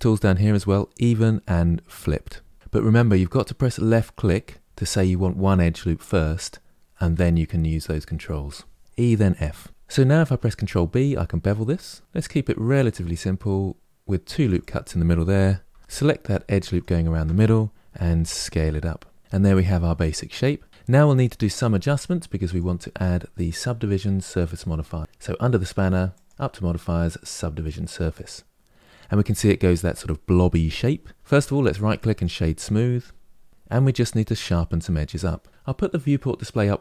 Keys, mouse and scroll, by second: 10.0 ctrl+b, 14.3 click, 15.4 3, 15.8 scroll down 1, 15.9 3, 16.4 alt+click, 17.6 s, 19.2-20.0 scroll down 3, 20.0-22.1 middle drag, 22.1-25.0 drag, 25.8-28.9 drag, 31.1-33.5 right drag, 36.5 click.